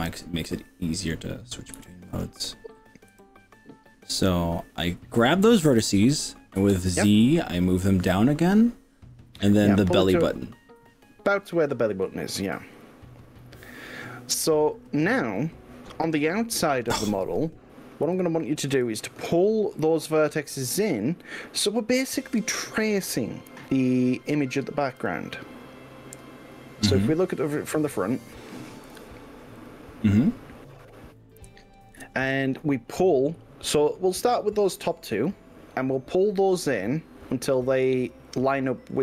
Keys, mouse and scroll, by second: 1.9 KP_1, 3.1 g, 6.7 z, 12.9 click, 16.1-18.5 middle drag, 18.7 KP_5, 19.1-20.1 middle drag, 20.2 middle click, 21.8 click, 22.9-23.7 middle drag, 25.1 KP_5, 25.4-26.7 middle drag, 27.3-29.5 middle drag, 29.7 click, 30.8 middle click, 32.1 KP_1, 38.3 middle click.